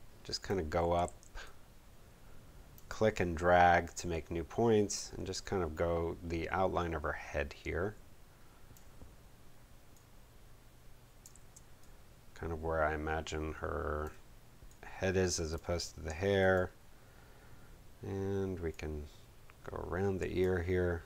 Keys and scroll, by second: 1.0 super+z, 11.3 super+z.